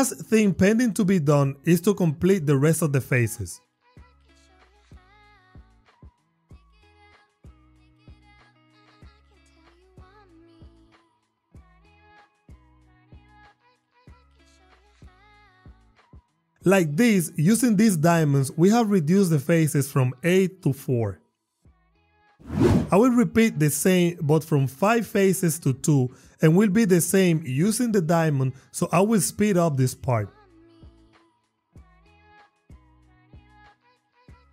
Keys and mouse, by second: 6.0 click, 7.2 click, 7.9 g, 8.2 click, 8.3 e, 8.6 y, 9.9 ctrl+click, 11.3 Tab, 12.4 f, 12.6 click, 13.1 Tab, 13.1 f, 13.6 e, 13.9 y, 14.3 ctrl+click, 14.9 Tab, 14.9 f, 15.1 click, 15.3 Tab, 15.3 f, 15.7 ctrl+click, 16.1 e, 16.2 y, 16.3 click, 17.3 Tab, 18.1 click, 18.3 click, 18.7 click, 19.1 click, 19.3 click, 19.6 click, 20.0 click, 20.5 click, 21.4 click, 22.7 Tab, 23.5 x, 25.0 shift+a, 27.7 Tab, 29.4 shift+click, 30.7 r, 31.0 s, 31.4 x, 31.8 click, 32.2 ctrl+r, 33.0 click, 33.2 click, 33.9 Tab.